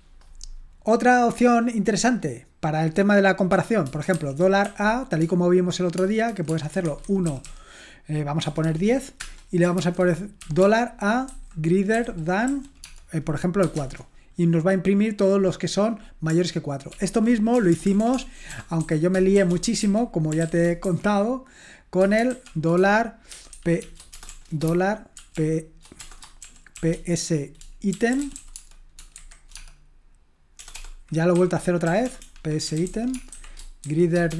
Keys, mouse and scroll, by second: 1.9-3.8 scroll down 1, 3.8 scroll down 1, 4.1-4.6 typing, 6.0-14.1 typing, 16.9 ctrl+p, 17.5-29.5 typing, 30.6-34.3 typing, 33.8 Right.